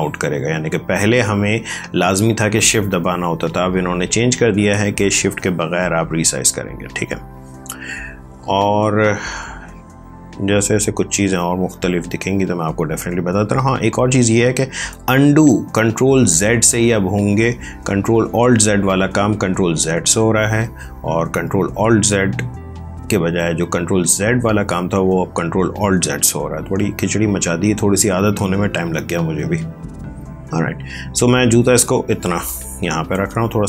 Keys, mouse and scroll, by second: 1.4 Escape, 3.1 ctrl+t, 4.8 click, 7.2 click, 9.8 click, 16.4 click, 23.2 click, 27.2 click.